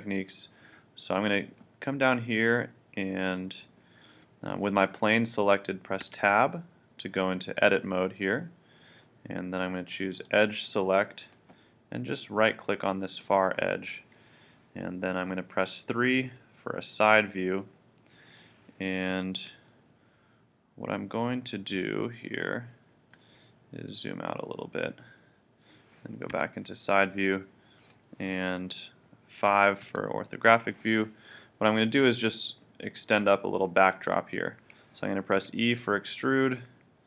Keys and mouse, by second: 6.1 Tab, 10.2-12.5 drag, 12.5-15.2 right drag, 16.2 KP_3, 19.7 middle click, 20.5-21.6 middle drag, 23.5-25.7 middle drag, 26.3 KP_3, 29.9 KP_5, 35.4 e.